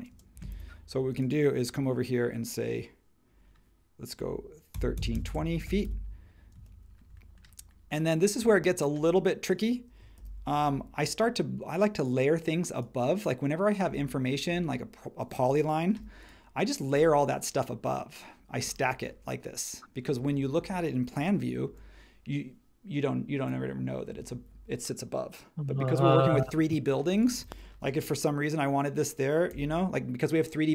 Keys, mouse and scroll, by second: 0.1-0.5 typing, 4.5-6.5 typing, 10.2 super+g, 10.5 m, 15.9 m, 17.0 space, 21.6 super+1, 27.1 space, 27.8 m.